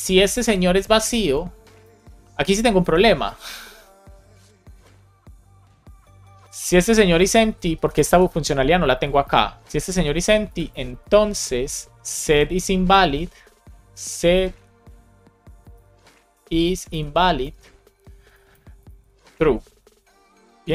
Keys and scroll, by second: 0.7 super+c, 1.7 Return, 3.3 shift+8, 3.7 BackSpace, 5.7 super+v, 6.6 alt+Left, 7.5 shift+e, 8.3 shift+9, 8.8 super+Right, 9.2 shift+0, 10.4 space, 10.7 shift+7, 11.3 space, 15.7 shift+i, 16.7 shift+i, 17.3 Return, 17.9 shift+9, 18.8 super+s, 20.0 Up.